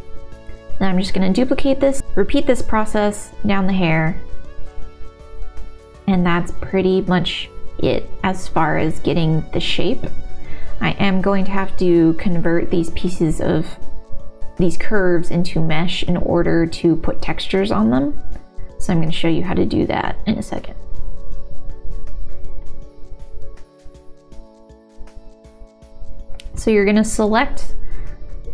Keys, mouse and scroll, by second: 0.3 Tab, 0.4-3.4 typing, 1.8 middle click, 1.9 click, 2.0 Tab, 2.2 click, 2.5 click, 4.5 middle click, 4.9 click, 5.1 w, 5.3 g, 6.2 g, 6.4 middle click, 6.6 middle click, 6.8 middle click, 7.5 ctrl+s, 8.8 shift+middle click, 9.1 middle click, 10.0 middle click, 11.2 alt+s, 11.2 g, 12.5 shift+middle click, 12.9 shift+click, 14.2 g, 14.2 middle click, 14.3 click, 14.4 shift+click, 14.7 middle click, 15.9 g, 15.9 click, 16.4 alt+g, 17.6 g, 17.7 click, 18.0 g, 18.2 click, 18.2 g, 18.4 g, 19.0 click, 19.4 click, 19.4-23.9 typing, 19.5 middle click, 19.8 middle click, 20.5 click, 22.0 click, 23.1 middle click, 23.5 ctrl+s, 23.5 middle click, 24.2 middle click, 24.3 click, 24.3 right click, 24.6 Tab, 24.6 click, 24.6 right click, 24.8 click, 24.8 right click, 24.8 click, 24.9 right click, 25.0 g, 25.2 y, 25.2 o, 25.4 q, 26.6 q.